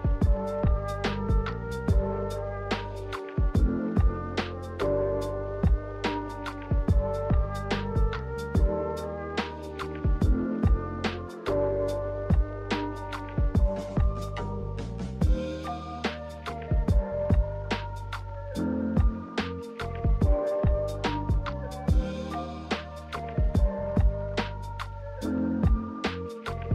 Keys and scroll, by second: 15.0 g, 24.4 z.